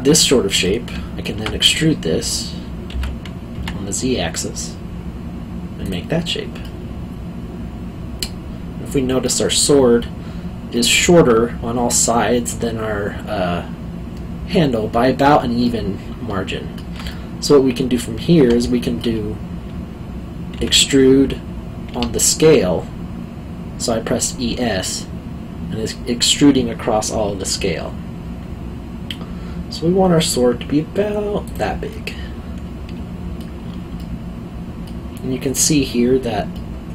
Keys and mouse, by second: 2.9 e, 3.5 z, 5.8 click, 6.6 middle click, 15.6 middle click, 17.1 middle click, 18.6 alt+middle click, 20.5 e, 21.9 s, 31.4 click, 31.9 middle click, 34.0 alt+middle click, 36.5 middle click.